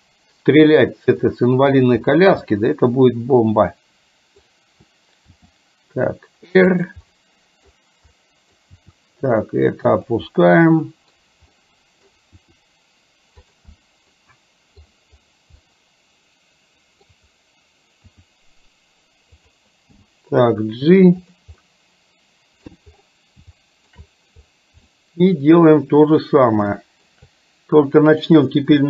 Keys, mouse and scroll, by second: 0.1-0.9 middle drag, 1.3 middle click, 2.4 scroll up 1, 2.7-4.4 middle drag, 4.4-5.4 scroll down 1, 5.4 r, 7.1-7.8 middle drag, 8.2 middle click, 8.9 r, 10.4-11.3 middle drag, 11.6-12.1 middle drag, 12.4 r, 14.2-14.9 middle drag, 15.7-17.8 middle drag, 18.2 r, 19.9 g, 21.7-22.7 middle drag, 23.6-24.1 shift+middle drag, 25.1-26.6 middle drag, 26.8 shift+middle drag.